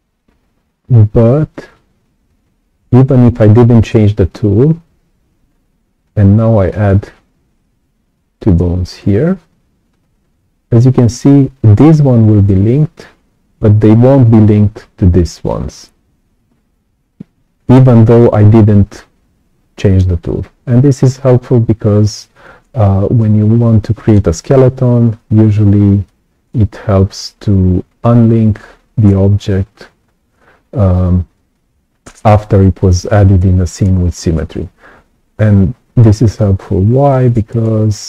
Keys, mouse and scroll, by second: 6.6-8.9 alt+drag, 17.8 right click, 17.8 click, 19.8-21.0 right drag, 19.8 click, 21.2-21.5 scroll down 2, 21.8-22.2 scroll up 2, 22.3-24.1 right drag, 22.4-24.1 drag, 25.7-26.0 scroll down 2, 26.0 right click, 37.0 right click, 37.6 click.